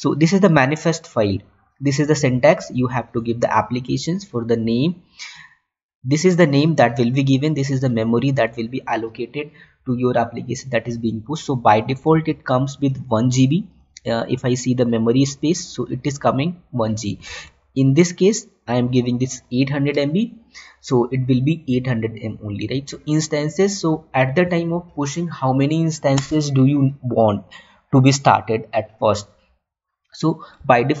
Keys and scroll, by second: 12.7 Tab, 17.9 Tab.